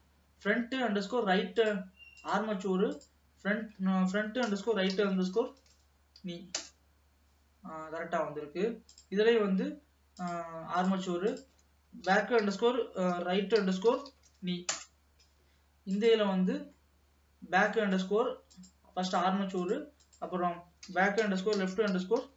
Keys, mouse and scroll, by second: 0.9 middle click, 1.6-6.1 drag, 8.9 click, 10.2-14.2 drag, 14.2 e, 16.0 click, 16.7 scroll down 2, 16.9-18.7 middle drag, 18.7 click, 19.1-22.3 drag.